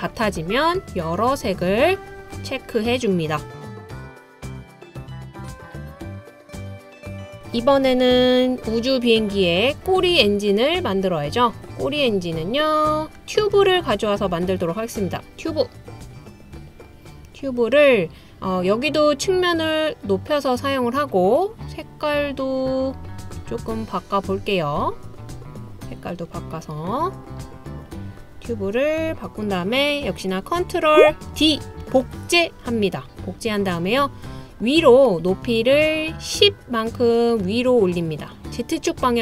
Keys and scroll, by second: 31.8 super+d.